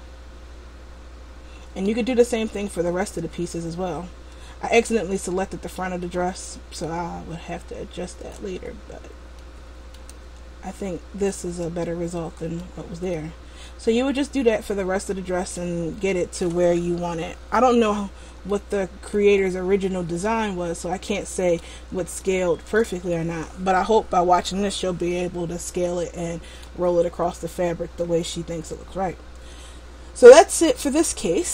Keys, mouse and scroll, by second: 2.3 Tab, 3.5 middle click, 6.2 middle click, 9.5 middle click, 10.4 Tab, 11.0-11.6 scroll down 2, 11.4 middle click, 13.2 middle click, 17.8-18.7 scroll up 2, 18.7 middle click, 19.6 middle click, 22.4 shift+middle click, 23.3 middle click, 27.4-30.7 scroll down 1.